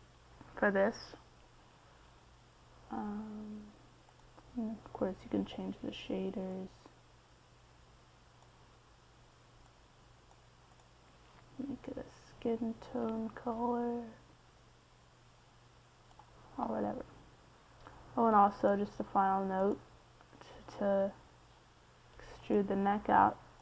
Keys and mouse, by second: 1.5-3.5 middle drag, 5.5-8.8 middle drag, 13.8-14.8 middle drag, 18.0-20.3 middle drag, 20.3-22.9 drag.